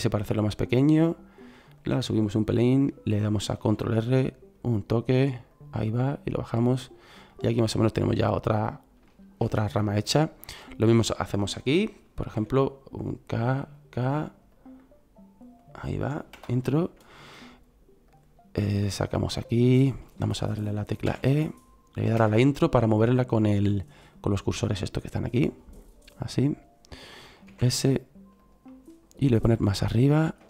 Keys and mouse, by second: 3.5 ctrl+r, 7.2 middle click, 7.4 middle click, 9.0 middle click, 10.2 middle click, 12.3 k, 18.0 click, 19.0 middle click, 21.0 e, 23.1 middle click, 24.2-26.8 middle drag, 26.8 click, 27.4 s, 28.6 click.